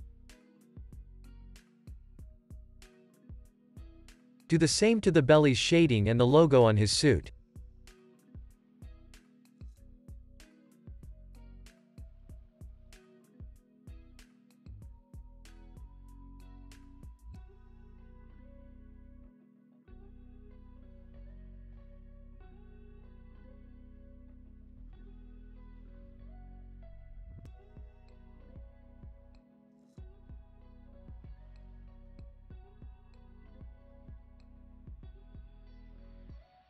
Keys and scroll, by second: 0.2 space, 0.5 super+s, 13.1 super+s, 20.5 super+s, 29.6 alt+w, 30.7 space, 34.5 space, 34.9 super+s.